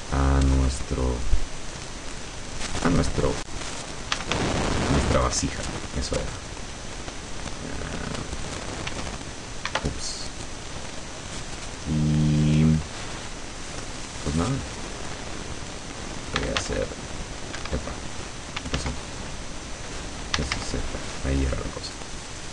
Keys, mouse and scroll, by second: 0.9-3.0 drag, 3.4-3.7 scroll up 1, 4.0-4.9 typing, 6.4 click, 7.4-8.8 drag, 9.0 s, 9.8 Escape, 13.9-16.2 middle drag, 16.3-17.2 typing, 17.7 Escape, 18.8 ctrl+z, 20.2-21.1 typing.